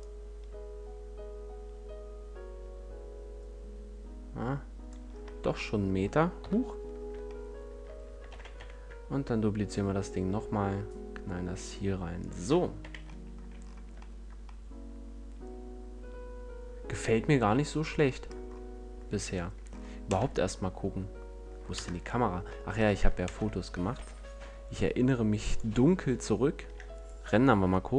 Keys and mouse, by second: 6.3 KP_1, 8.3 shift+d, 12.2 click, 12.7 z, 13.5 a, 13.7 middle click, 20.0 KP_0, 21.7 KP_0, 23.2 ctrl+alt+KP_0, 23.9 shift+f, 25.5-26.6 drag.